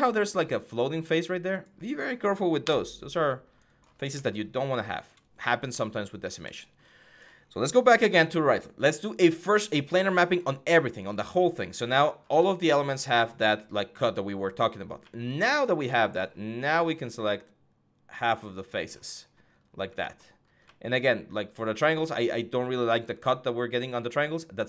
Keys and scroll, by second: 2.4 Delete.